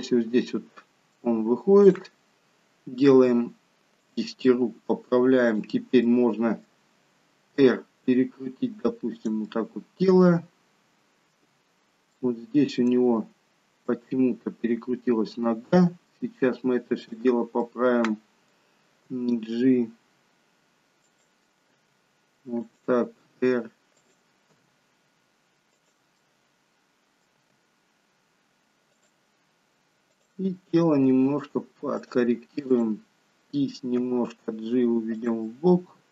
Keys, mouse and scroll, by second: 0.7 middle click, 1.8 click, 3.3 r, 4.5 middle click, 5.6 click, 6.1 middle click, 7.7 r, 9.5 middle click, 9.5-10.2 scroll up 1, 12.2 shift+middle click, 14.0 middle click, 17.2 click, 17.7 middle click, 19.1 g, 21.7 g, 23.4 r, 24.7 g, 26.3 middle click, 27.6 g, 30.1 click, 31.2 r, 32.8 click, 34.1 g, 35.6 middle click.